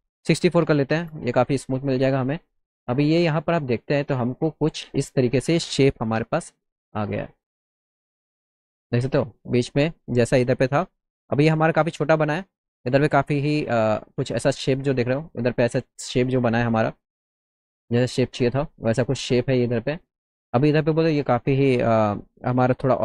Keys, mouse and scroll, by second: 0.9 Return, 2.3 middle click, 2.9 click, 3.4 middle click, 4.5 alt+middle click, 5.6 click, 6.3 F4, 6.9 scroll up 1, 7.4 alt+middle click, 7.9 middle click, 9.0 middle click, 13.8 middle click, 14.4 click, 16.4 middle click, 17.6-19.8 alt+middle drag, 20.0 middle click.